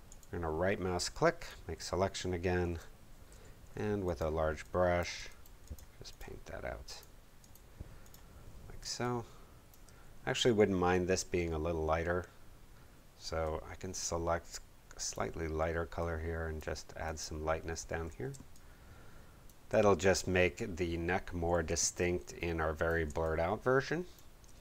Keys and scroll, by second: 2.6 Page_Up, 3.3 b, 8.8 space, 17.9 super+d, 18.3 super+space, 19.1 space, 21.6 space.